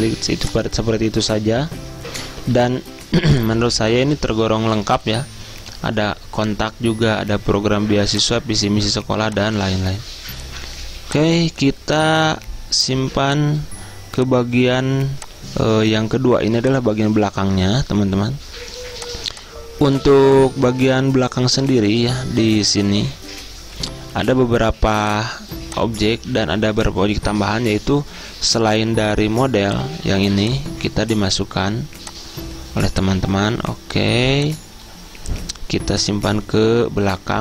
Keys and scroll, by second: 2.6 z, 13.1 z, 21.6 ctrl+z.